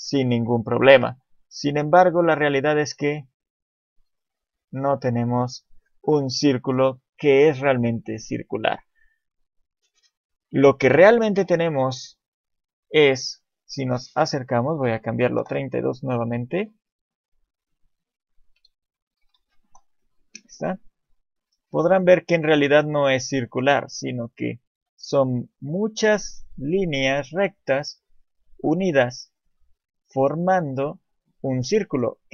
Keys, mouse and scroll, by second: 1.7 click, 12.6 click, 21.3 scroll up 2, 22.1 shift+middle click, 22.1 scroll up 5, 22.8-23.7 scroll up 4, 23.7-24.8 scroll down 5, 24.8-25.5 scroll up 4, 28.8 scroll down 5, 30.2 KP_7, 30.8-31.3 scroll down 2, 31.1 shift+middle click, 31.9 scroll down 1.